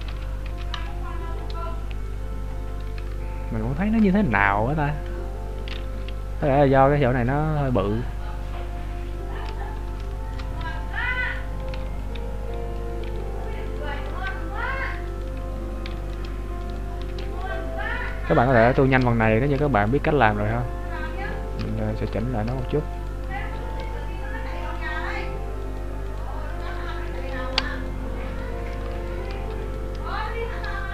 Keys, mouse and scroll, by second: 0.8 Tab, 1.2-2.6 scroll down 12, 2.6 scroll up 2, 3.1 Tab, 3.1-3.7 scroll up 3, 4.4-4.7 scroll up 4, 8.0-8.7 scroll down 6, 8.7 scroll up 2, 9.4-9.8 scroll down 2, 10.1 shift+middle click, 10.6 scroll up 1, 11.3 right click, 11.3-11.8 scroll up 2, 11.8 b, 13.7 right click, 14.0 b, 15.1 alt+right click, 16.7 right click, 17.4 alt+right click, 18.5 alt+shift+right click, 18.7 alt+shift+right click, 19.1 right click, 19.9 alt+shift+right click, 21.9-22.2 scroll up 2, 22.6 scroll up 4, 23.1 shift+right click, 23.8 alt+shift+right click, 25.7 shift+right click, 27.6 alt+shift+right click, 29.0 alt+shift+right click, 29.7 right click, 30.2 shift+right click.